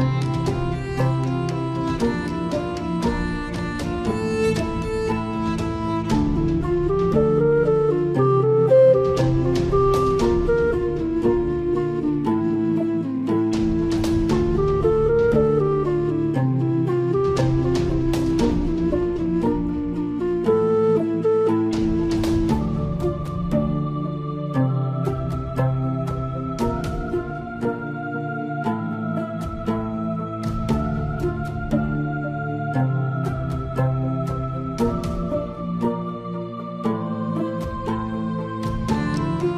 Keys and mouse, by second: 6.9 middle click, 8.7 ctrl+r, 13.2 Tab, 13.8 middle click, 14.8 middle click, 15.6 middle click, 16.8 middle click, 18.6 ctrl+2, 19.2-20.4 middle drag, 22.2 ctrl+s, 23.3 KP_7, 27.3 click, 30.1 click, 30.8 middle click, 33.4 KP_7, 35.3 shift+d, 38.5 s.